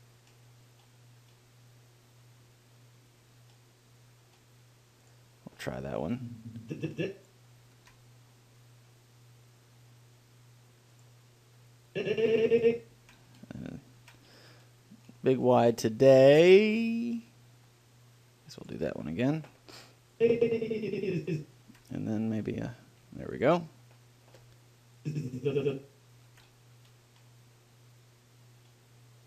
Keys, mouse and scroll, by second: 6.4-8.4 drag, 8.0 ctrl+l, 12.2-14.0 drag, 13.2 ctrl+l, 14.3 ctrl+l, 20.4-22.2 drag, 22.0 ctrl+l, 25.3-27.2 drag, 26.6 ctrl+l.